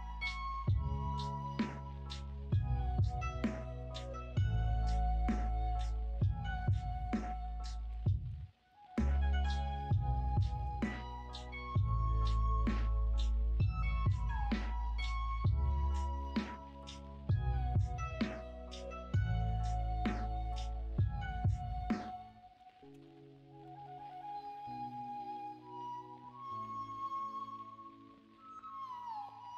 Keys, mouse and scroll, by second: 2.5-3.8 middle drag, 3.9 l, 8.0 middle click, 8.7-10.1 middle drag, 10.6 KP_1, 13.6-17.4 drag, 17.4-18.4 scroll up 1, 18.4-19.5 scroll up 1, 19.5 scroll up 1, 19.7-22.2 scroll down 1, 22.2 scroll up 1, 22.4 middle click, 22.9 ctrl+s.